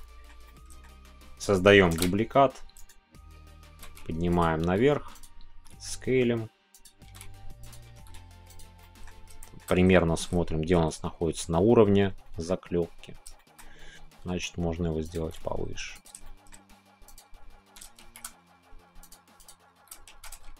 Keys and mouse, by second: 0.4-0.8 middle drag, 1.9 shift+d, 3.6 g, 4.3-5.4 drag, 5.4 s, 5.5 z, 6.7 click, 7.6 z, 7.6 click, 8.4 z, 8.5 click, 8.8 middle click, 9.4 middle click, 12.2-13.2 middle drag, 13.3-15.0 shift+middle drag, 15.0 click, 15.0 z, 15.9 click, 16.2 middle click, 17.1 click, 18.0 shift+z, 19.0 click, 19.7 s, 20.1 shift+z.